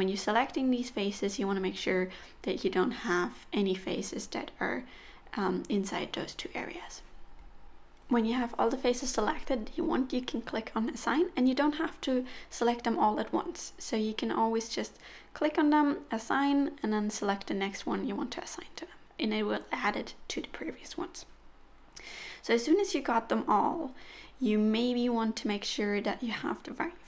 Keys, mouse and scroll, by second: 0.4 alt+shift+click, 0.7 alt+shift+click, 1.1 alt+shift+click, 1.8 alt+shift+click, 2.1 middle click, 2.7 alt+shift+click, 3.1 alt+shift+click, 3.4 middle click, 4.1 alt+shift+click, 4.8 c, 6.0 middle click, 7.2 alt+shift+click, 7.6 alt+shift+click, 8.3 alt+shift+click, 8.8 alt+shift+click, 9.2 middle click, 9.9-10.3 scroll up 4, 10.7 scroll up 2, 10.9 shift+middle click, 11.7 shift+click, 12.3 shift+click, 12.7 middle click, 14.3 alt+z, 14.3 middle click, 14.6 alt+shift+click, 15.6 alt+click, 17.0 alt+shift+click, 18.4 alt+click, 18.7 middle click, 19.7 alt+shift+click, 20.1 alt+shift+click, 20.6 alt+shift+click, 21.0 alt+shift+click, 21.4 alt+shift+click, 21.7 middle click, 22.4 c, 25.6 middle click.